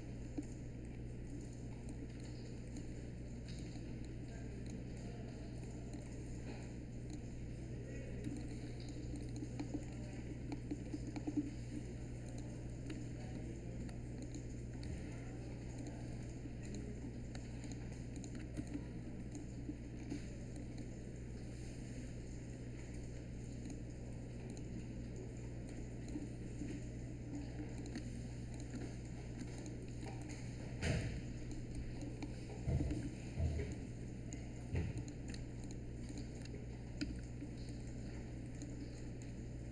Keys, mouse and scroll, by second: 8.2 space, 18.5 space, 30.8 space, 37.0 r.